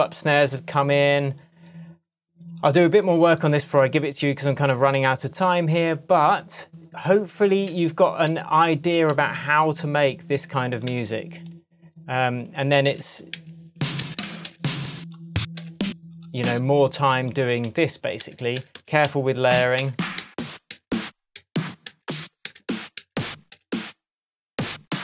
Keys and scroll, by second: 7.7 Left, 10.9 Right, 12.9 Up, 15.6 Up, 17.5 Down.